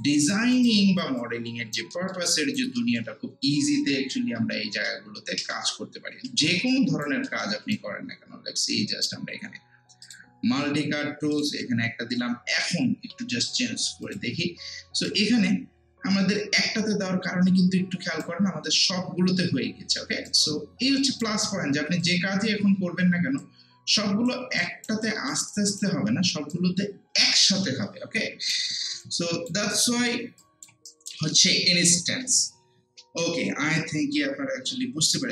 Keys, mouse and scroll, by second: 0.3 alt+right click, 0.7 alt+click, 1.2 alt+right click, 1.9 alt+middle click, 2.3 alt+right click, 2.8 alt+middle click, 4.4 ctrl+z, 6.7 alt+right click, 7.3 alt+middle click, 7.7-10.0 right drag, 10.0 click, 11.3 ctrl+click, 12.0 scroll down 1, 14.0 click, 15.1-22.0 right drag, 22.0 click, 22.7 w, 23.4 click, 24.6 alt+right click, 25.0 alt+click, 25.5 alt+right click, 26.1 alt+middle click, 29.0 alt+click, 29.7 alt+right click, 30.4 alt+click, 30.9 alt+right click, 31.3 alt+middle click, 34.6 scroll down 1, 35.0 scroll up 1, 35.1 alt+right click.